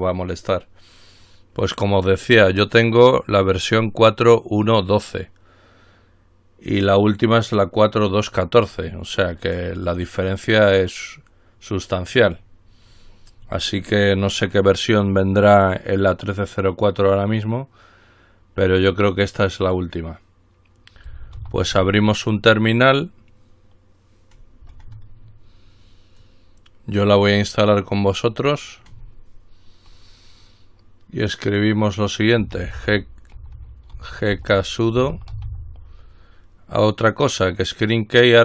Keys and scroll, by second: 21.6 ctrl+alt+t, 32.9 alt+k, 34.1 alt+g, 34.5 alt+k, 35.2 alt+s, 35.3 alt+u, 35.5 alt+d, 35.7 alt+c.